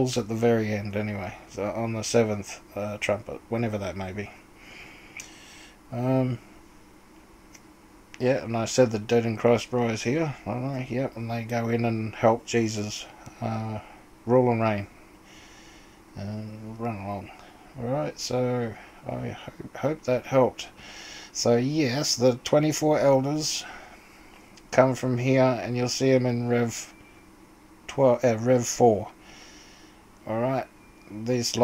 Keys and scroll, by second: 8.4 o.